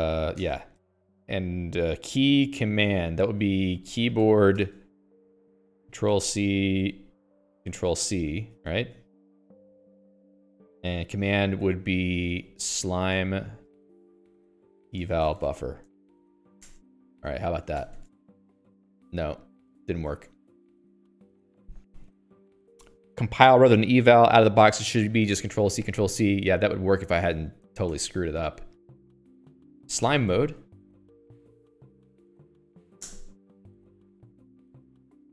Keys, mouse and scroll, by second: 0.1 Return, 0.8 space, 4.0-9.6 typing, 12.2-16.7 typing, 17.1 Return, 18.5 ctrl+c, 20.6 click, 21.3 q, 21.7 Escape, 27.6 click, 27.7 Escape, 29.5 ctrl+g, 29.9-31.4 typing, 33.5 Return, 35.0 ctrl+c.